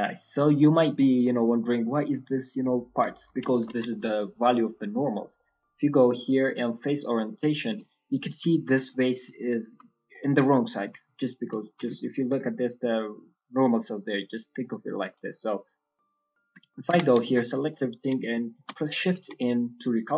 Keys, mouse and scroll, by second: 0.7 scroll up 4, 0.9 middle click, 1.4 scroll up 1, 1.6 middle click, 2.0-2.4 scroll down 3, 3.0 shift+middle click, 3.0 shift+scroll up 1, 3.4 ctrl+middle click, 4.0 shift+middle click, 5.0 click, 7.1 middle click, 7.8-8.5 scroll up 3, 8.5 shift+middle click, 8.8 middle click, 9.3 ctrl+middle click, 10.1 middle click, 10.1 ctrl+scroll up 1, 11.5 scroll up 1, 11.6 shift+middle click, 11.9 scroll down 1, 11.9 ctrl+middle click, 12.6 middle click, 13.5 middle click, 16.5 shift+middle click, 16.8 Tab, 17.0 scroll down 6, 17.2 a, 17.7 scroll down 1, 18.5 shift+n, 18.8-19.2 scroll down 2, 19.1 Tab, 19.2 scroll up 1, 19.3 middle click.